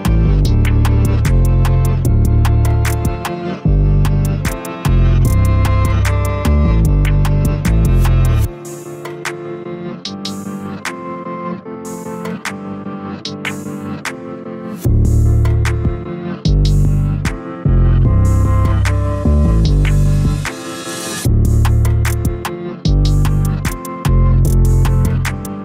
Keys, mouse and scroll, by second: 0.0 3, 0.4 click, 2.1 Tab, 4.9 ctrl+3, 6.1 click, 7.3 click, 8.0 Tab, 9.1 Tab, 13.3-14.3 drag, 14.3 Tab, 16.6 ctrl+i, 17.9 x, 19.0 Tab, 19.7-20.4 middle drag, 20.4-20.9 scroll up 1, 21.2-21.8 shift+middle drag, 21.8 Tab, 22.2 a, 22.5 KP_1, 23.4 e, 24.8 e.